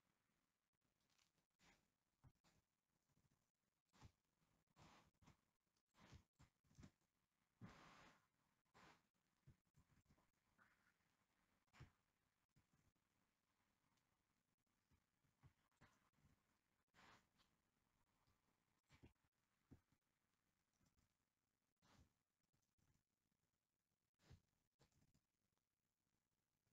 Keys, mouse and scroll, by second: 1.0 right click, 1.6 click, 2.5 alt+click, 3.3 g, 4.1 click, 4.9 alt+click, 5.3 g, 6.5 alt+click, 6.9 g, 8.9 click, 9.8 alt+click, 10.2 g, 11.9 click, 12.7 alt+click, 13.0 g, 14.8 click, 16.3 g, 17.1 click, 17.7-19.0 middle drag, 19.0 alt+click, 19.3-21.0 shift+middle drag, 19.5-21.0 scroll up 2, 21.0 g, 22.0 click, 22.7 alt+click, 23.0 g, 24.9 alt+click, 25.1 g.